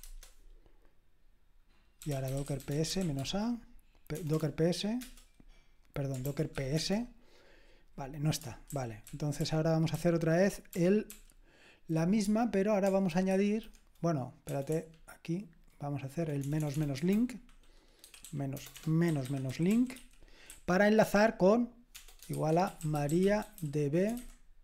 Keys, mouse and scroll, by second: 0.0-0.7 typing, 1.8-4.3 typing, 5.0 Return, 6.2 ctrl+p, 6.3-7.0 typing, 8.7 ctrl+p, 9.1 ctrl+p, 9.4 ctrl+p, 9.9 ctrl+p, 12.2 space, 13.3 \, 15.4-16.9 typing, 18.0-24.6 typing.